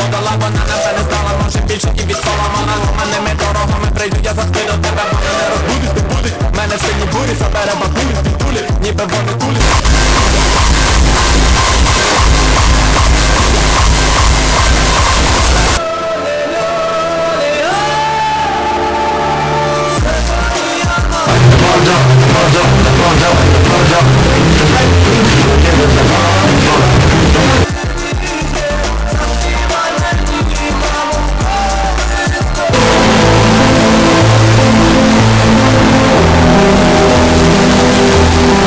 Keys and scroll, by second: 15.8 Page_Down, 27.6 Page_Down.